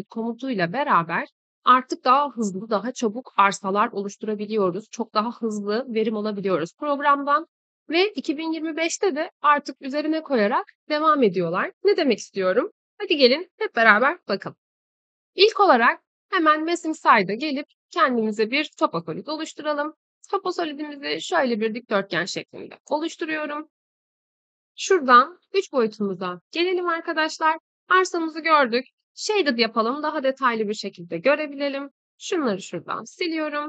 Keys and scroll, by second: 32.7 Delete.